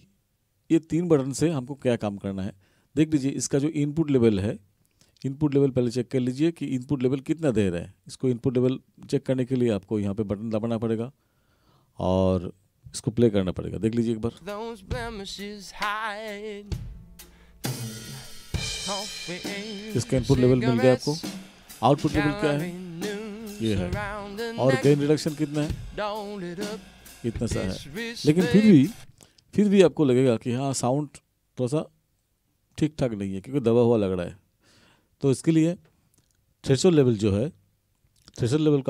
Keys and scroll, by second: 14.4 space, 29.0 space.